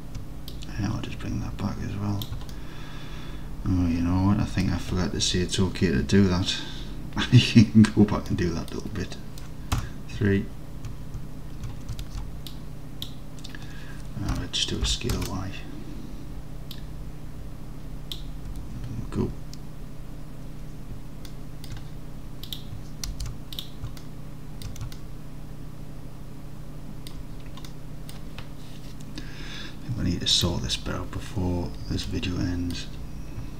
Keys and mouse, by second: 0.6-2.3 drag, 2.6-4.7 alt+drag, 8.3-8.8 middle drag, 9.8 KP_3, 12.0 alt+z, 12.6 click, 14.4 s, 15.0 y, 15.2 KP_Enter, 15.2 KP_0, 16.9-18.0 drag, 18.6 Tab, 21.4 alt+click, 22.5 click, 23.2 alt+z, 24.0 alt+click, 24.6 alt+drag, 25.0 alt+click, 25.3-27.2 alt+drag, 27.7 middle drag, 28.0 middle click, 30.4-31.9 drag, 32.2-32.8 alt+middle drag.